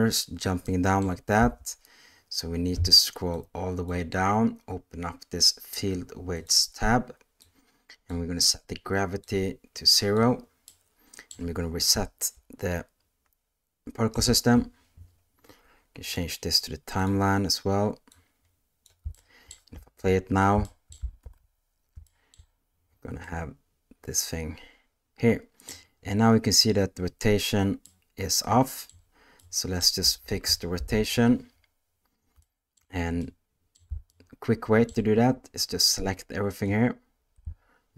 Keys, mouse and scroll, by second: 0.7-1.0 middle drag, 1.4 space, 3.4 click, 6.3 click, 7.5 click, 9.2 click, 10.7 middle click, 14.1 shift+Left, 16.1-17.0 drag, 18.1 click, 19.1-19.5 shift+middle drag, 19.8 space, 20.7 shift+middle click, 21.2 alt+a, 22.0 shift+middle drag, 23.2-25.7 middle drag, 27.9-28.9 middle drag, 29.4 middle click, 30.0 space, 30.8 shift+Left, 32.4-32.8 shift+middle drag, 33.2-33.7 middle drag, 34.1-34.9 shift+middle drag, 35.8-36.7 drag.